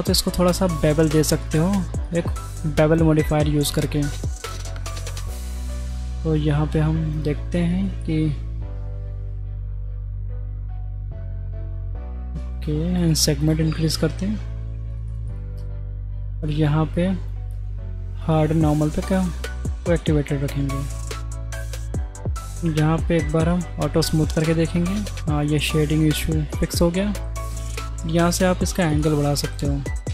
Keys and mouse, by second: 1.4-3.7 right drag, 4.5 middle drag, 7.1 click, 8.2-9.8 shift+drag, 10.6-11.8 shift+drag, 13.4 click, 15.0 click, 15.3 click, 16.4 click, 18.2 click, 19.2 middle click, 20.1-20.4 middle drag, 22.5-23.6 drag, 24.6 middle click, 25.4-27.2 middle drag, 29.0-30.1 drag, 29.5 KP_6.